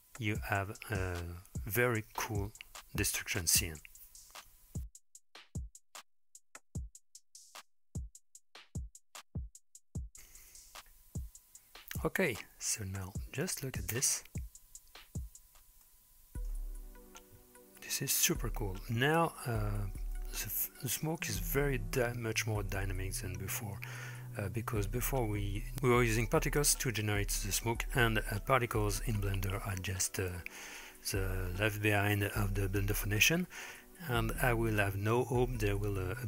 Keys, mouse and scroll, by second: 13.5 click, 14.0 space, 15.9-16.6 middle drag, 17.1 scroll up 1, 20.3-21.5 middle drag, 27.1-29.8 drag, 31.7-32.5 shift+middle drag, 32.7-33.8 middle drag.